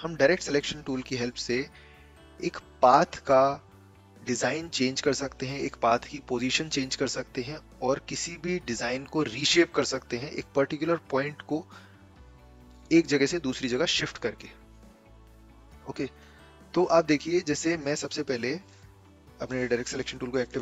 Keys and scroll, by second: 18.8 a.